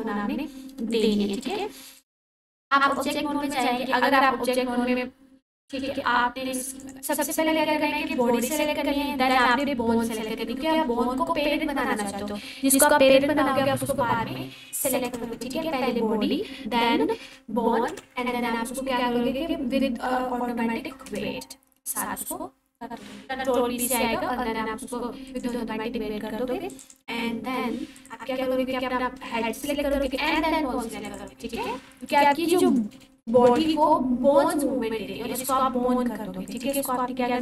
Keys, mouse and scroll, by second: 0.9 click, 9.3 shift+click, 15.1 ctrl+p, 17.9 ctrl+p, 25.3 click, 30.1 shift+click, 32.1 shift+click, 33.5 ctrl+p, 36.5 click.